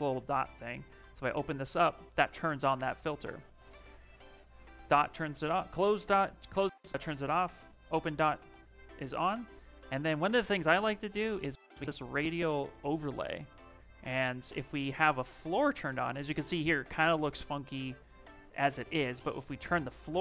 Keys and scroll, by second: 3.4 shift+m.